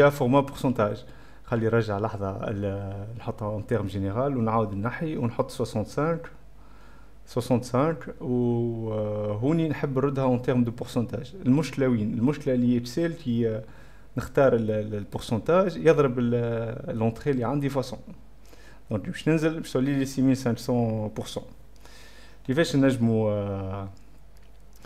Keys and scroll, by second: 3.7-6.8 typing, 22.5 -, 22.7 =.